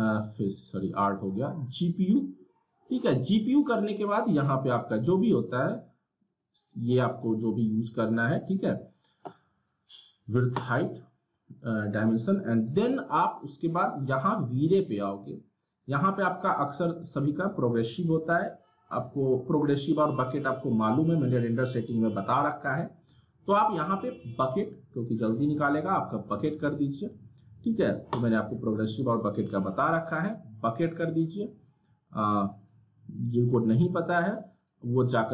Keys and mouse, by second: 6.3 click, 10.5 click, 15.6 click, 19.4 click, 25.4 click, 33.9 click.